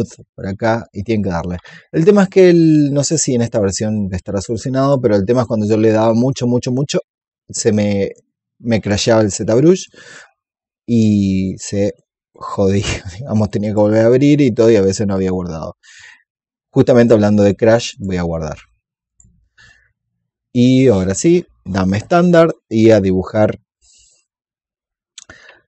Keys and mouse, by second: 2.1 click, 3.3-4.5 alt+drag, 8.6 click, 13.5 click, 17.8 click.